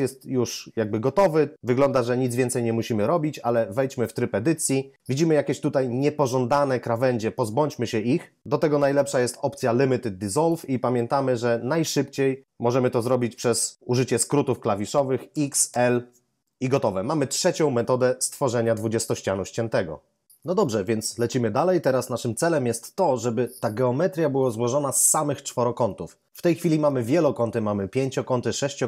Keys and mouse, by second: 3.9 Tab, 15.3-15.7 typing.